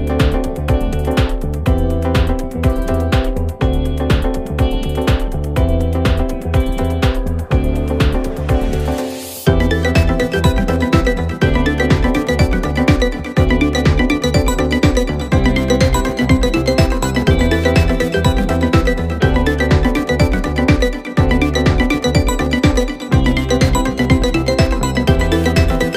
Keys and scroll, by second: 1.3 ctrl+z, 8.7 ctrl+z, 15.9 ctrl+z.